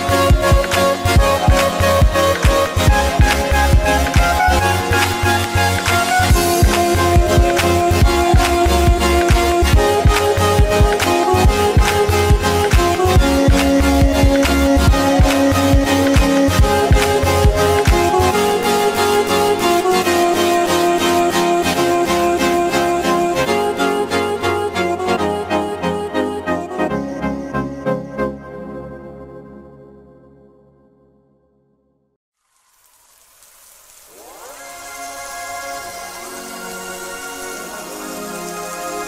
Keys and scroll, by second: 6.4 ctrl+alt+z, 21.2 ctrl+alt+z.